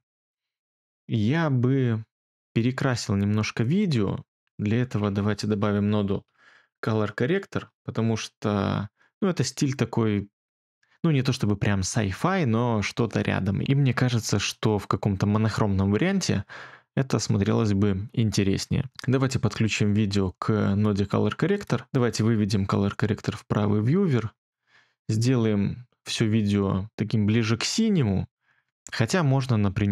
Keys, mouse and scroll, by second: 5.5-7.2 typing, 7.5 Return, 23.0 2.